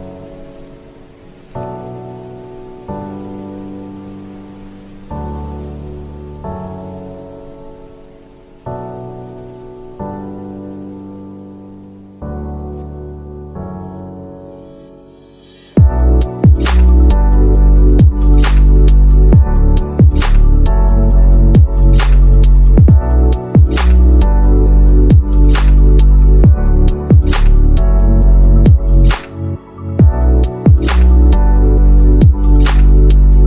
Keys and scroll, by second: 6.6 z, 8.3 z, 11.1 c, 27.8 space.